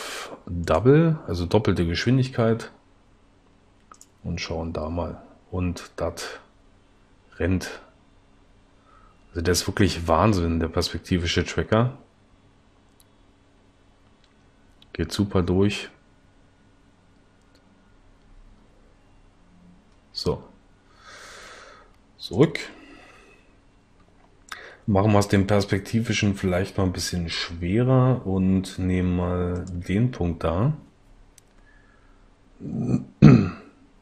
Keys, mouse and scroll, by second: 32.0 s.